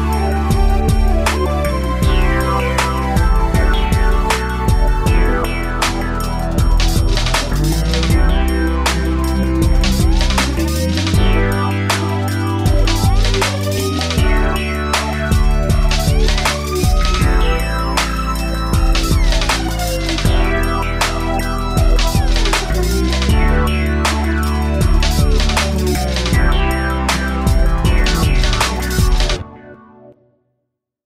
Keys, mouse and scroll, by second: 0.7 click, 4.7 shift+middle click, 6.4 click, 7.6 click, 7.7 click, 8.9 click, 10.4 ctrl+c, 10.7 Up, 11.9 Down, 12.4 ctrl+shift+v, 13.7 Down, 14.6-15.0 scroll down 1, 15.0 scroll up 2, 16.9 shift+middle click, 18.5 click, 20.3 ctrl+c, 21.6 ctrl+shift+v, 22.9 Down, 23.3 Down, 23.8 shift+space, 24.7 Escape, 25.8 click, 26.2 click, 30.6 middle click.